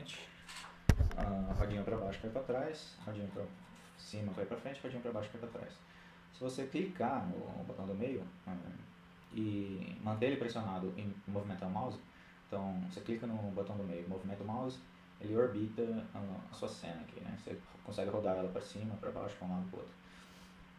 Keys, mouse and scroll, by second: 1.1-1.8 scroll down 1, 1.8-2.3 scroll down 1, 2.3-2.7 scroll up 1, 2.7-5.3 scroll down 1, 5.3-5.8 scroll down 1, 11.4-12.8 middle drag.